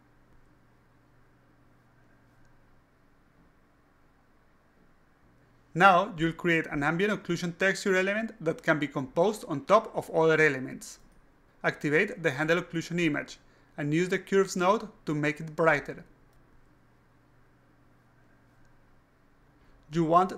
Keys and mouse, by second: 0.9 click, 2.4-3.6 drag, 4.3 alt+click, 7.4-8.5 alt+drag, 11.7 click, 14.0 click, 14.5 alt+click, 15.9 click, 16.5 click, 17.8-18.9 drag.